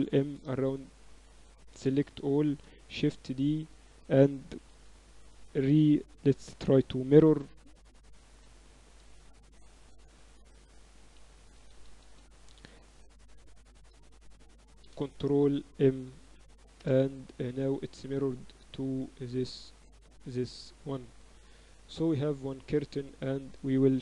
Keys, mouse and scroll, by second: 0.2 x, 1.8 a, 1.9 a, 2.2 a, 3.0 shift+d, 6.4 space, 9.6 Down, 11.6 BackSpace, 11.8 BackSpace, 12.0 BackSpace, 12.2 BackSpace, 14.5 Down, 18.6-20.6 drag, 21.5 Tab, 22.1 z, 22.6 z.